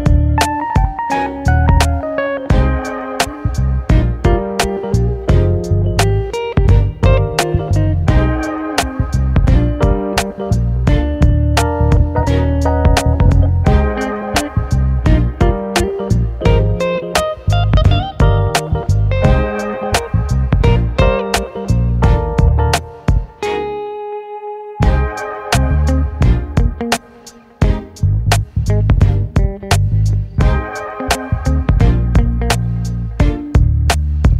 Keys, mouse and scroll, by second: 0.1 KP_3, 0.7 scroll up 3, 0.9 shift+middle click, 1.5-5.8 scroll up 2, 5.8 KP_7, 6.2 scroll down 2, 6.5 shift+middle click, 6.9 scroll up 1, 7.7 scroll up 2, 7.7 click, 8.9 middle click, 9.8 ctrl+r, 12.5 click, 13.3 shift+click, 13.4 scroll up 1, 14.1 shift+click, 14.7 g, 16.6 ctrl+click, 17.5 ctrl+click, 17.9 g, 19.0 scroll down 1, 19.3 middle click, 20.0-21.0 scroll down 10, 21.0 click, 21.2 click, 22.2 KP_Decimal, 22.8 click, 23.3 click, 23.6 shift+click, 23.9 shift+click, 25.0 g, 26.5 ctrl+click, 27.1 ctrl+click, 28.2 g, 29.3 middle click, 29.7-30.1 scroll up 1, 30.1 click, 31.2 g, 31.9-32.4 scroll down 1, 32.4 click, 32.7 middle click, 33.3 ctrl+r.